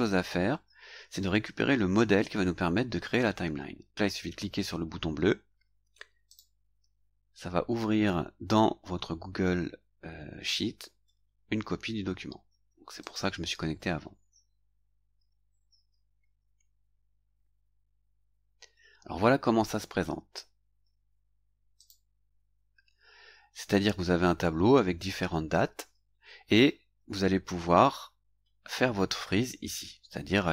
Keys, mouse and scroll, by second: 6.3 click, 13.0 click, 21.8 click.